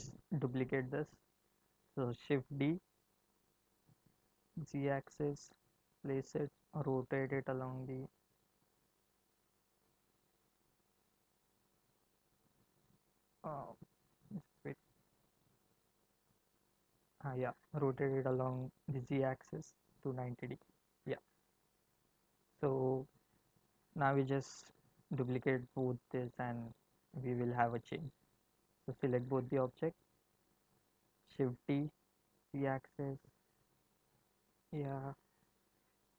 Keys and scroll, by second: 2.0 shift+d, 3.2 z, 6.9 r, 15.9 ctrl+z, 17.6 r, 19.1 z, 20.6 Return, 31.2 shift+d, 31.8 z.